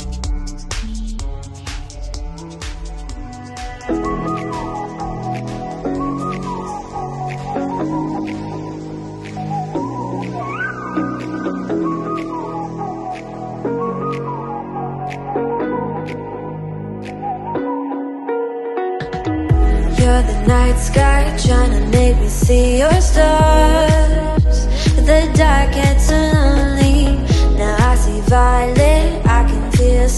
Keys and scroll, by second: 1.8 t, 7.4 super+a, 8.4 shift+super+k, 10.1 v, 11.7 super+t.